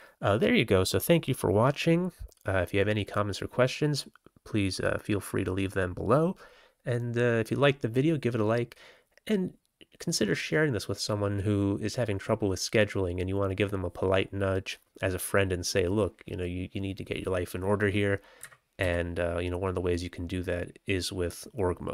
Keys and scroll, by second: 18.3 Up, 18.7 Right.